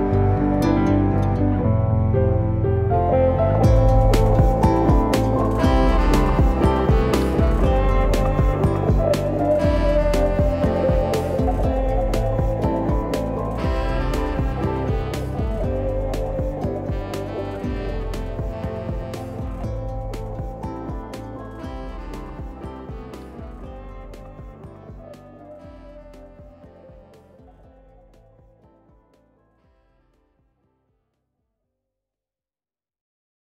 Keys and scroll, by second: 2.1 ctrl+a, 5.6 0, 7.2 ctrl+alt+KP_0, 8.5 g, 9.9-11.8 typing, 13.0 g, 16.1 e, 17.7 ctrl+b, 25.0 g, 26.8 Escape, 30.4 g, 31.7 g.